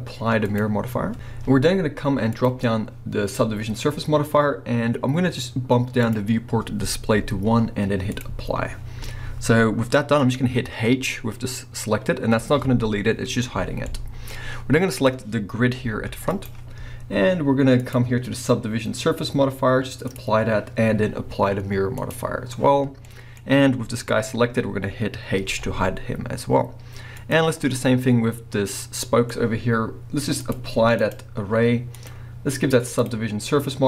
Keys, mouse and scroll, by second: 0.5-2.4 drag, 6.0-9.9 drag, 9.5-9.9 scroll down 1, 9.9-14.9 middle drag, 10.2 scroll up 1, 12.4 h, 14.9 click, 15.3 scroll down 1, 15.8 g, 16.4 right click, 17.8 click, 20.1-23.0 drag, 23.0-25.4 middle drag, 23.5-24.8 scroll up 2, 24.8-25.4 scroll up 1, 25.4 h, 27.2 click, 27.6-30.4 middle drag, 30.4 click, 31.0-32.0 drag, 33.0-33.8 drag.